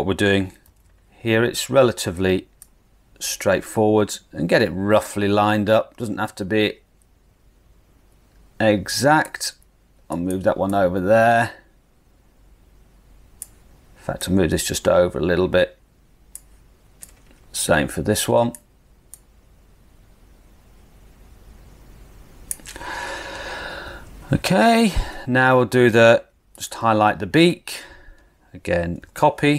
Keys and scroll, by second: 0.7 super+v, 28.9 super+c.